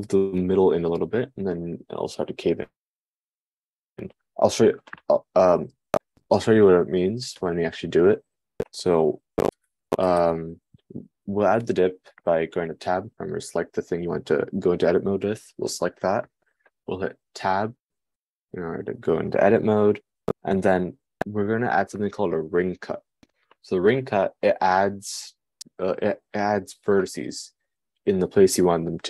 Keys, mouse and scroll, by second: 18.2 Tab.